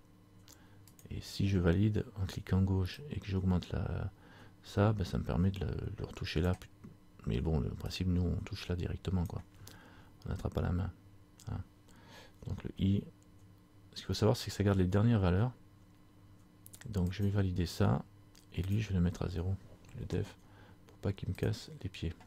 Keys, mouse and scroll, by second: 3.2 click, 8.0 click, 18.8 click.